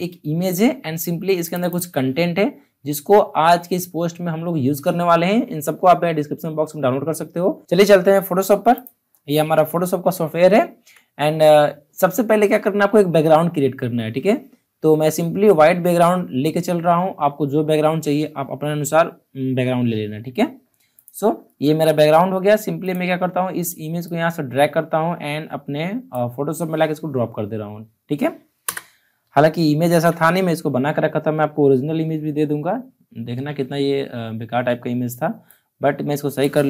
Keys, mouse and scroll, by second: 1.4 click, 7.6 click, 9.9 alt+scroll up 1, 10.1 alt+scroll down 1, 20.9 click, 22.8-28.5 drag, 28.6 Return, 29.8 ctrl+t, 35.0 ctrl+t, 35.4-36.6 drag.